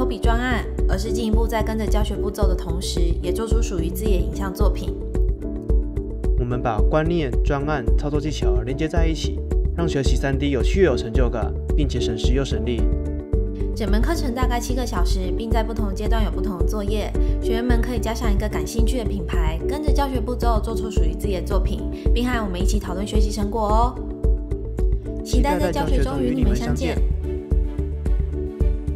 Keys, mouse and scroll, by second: 0.3 right click, 0.3 scroll down 1, 0.5 click, 0.6-2.0 typing, 0.8 alt+middle click, 0.9 alt+middle click, 0.9 alt+click, 1.0 alt+middle click, 1.2 click, 1.2 scroll down 1, 1.6 click, 1.8 click, 2.0 KP_Subtract, 4.4 BackSpace, 4.4 r, 4.4 space.